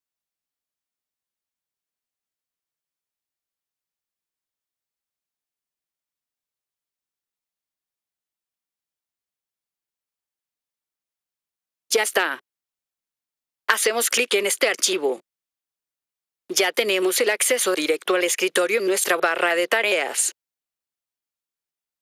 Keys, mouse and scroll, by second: 1.0 click, 3.6 click, 5.9 click, 8.9 click, 9.8 F3, 11.8 click, 14.5 click, 15.3 click, 15.5 click, 20.6-22.0 drag.